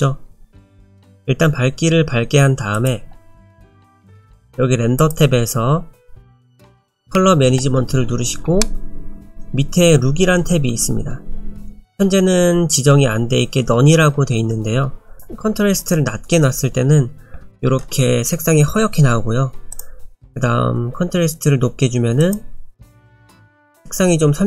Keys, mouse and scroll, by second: 2.7 click, 5.0 click, 6.7 click, 8.0-9.7 scroll down 7, 9.7-11.4 scroll down 1, 15.2 click, 19.7 click.